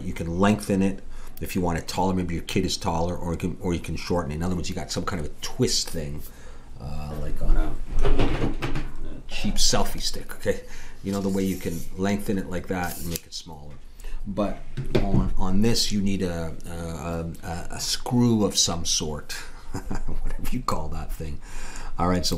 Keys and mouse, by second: 20.7 middle click.